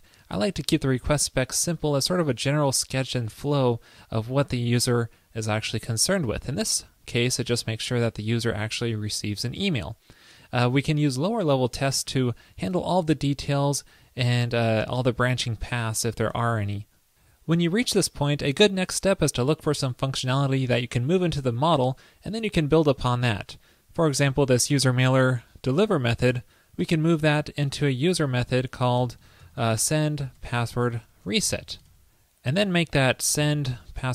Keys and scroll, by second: 28.5 super+x.